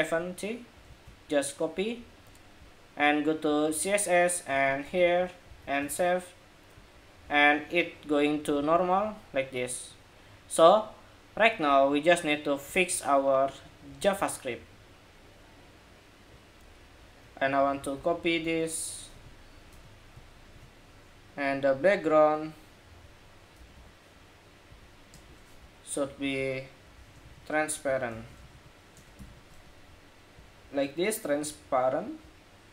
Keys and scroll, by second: 0.6 super+c, 4.7 super+v, 5.2 super+s, 5.6 super+Tab, 8.3 super+r, 17.5 super+c, 20.0 super+v.